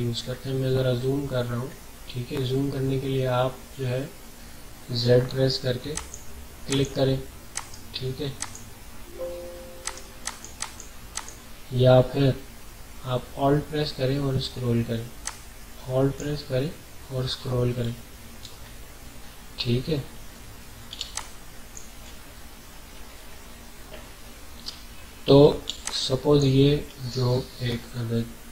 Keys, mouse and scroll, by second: 0.0-0.8 typing, 0.1 alt+scroll up 1, 1.7 alt+scroll up 1, 2.4 scroll down 1, 5.3-9.2 typing, 5.9 click, 7.5 right click, 8.4 click, 9.8 alt+right click, 10.2 alt+click, 14.1 alt+scroll up 1, 14.8 alt+scroll up 1, 15.2-17.6 alt+drag, 17.6 ctrl+d, 18.5 alt+scroll up 1, 19.1 alt+scroll up 1, 20.9 alt+space, 21.2 alt+click, 21.4 alt+space, 23.0 alt+scroll up 1, 25.6-26.4 typing, 25.8 click.